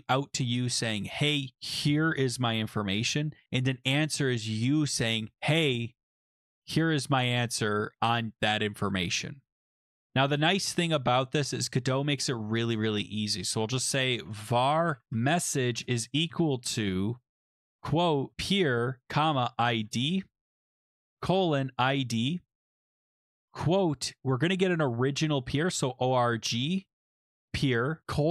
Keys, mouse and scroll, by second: 11.5 click, 12.8 Return, 13.2-22.5 typing, 22.6 Return, 25.1-28.3 typing.